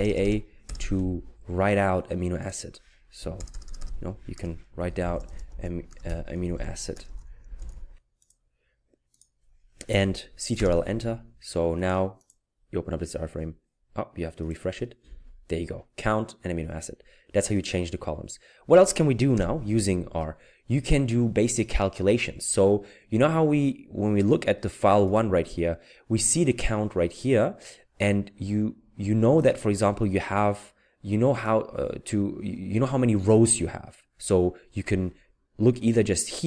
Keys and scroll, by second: 3.2 Right, 4.6-8.2 typing, 10.6 ctrl+Return, 19.4 Return.